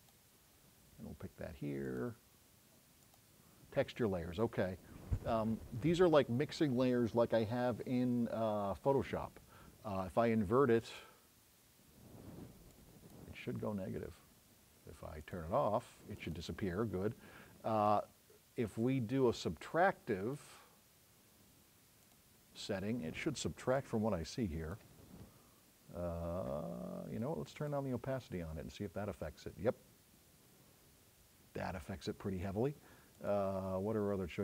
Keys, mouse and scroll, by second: 30.9 click.